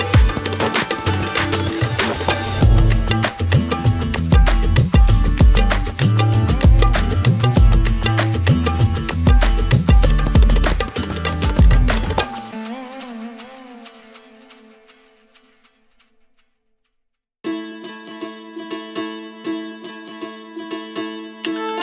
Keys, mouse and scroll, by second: 0.4-1.7 drag, 2.3 click, 3.0 shift+a, 4.0 click, 4.4-6.0 drag, 6.0 shift+d, 6.2 middle click, 6.5-7.5 drag, 7.8 drag, 8.1-9.6 drag, 9.9 shift+click, 10.5 middle click, 10.7 click, 11.6 middle click, 11.8 click, 12.1 x, 12.2 ctrl+shift+click, 12.5 x, 12.8 middle click, 13.7 shift+a, 16.6 shift+a, 17.8-18.9 drag, 19.7-21.8 drag.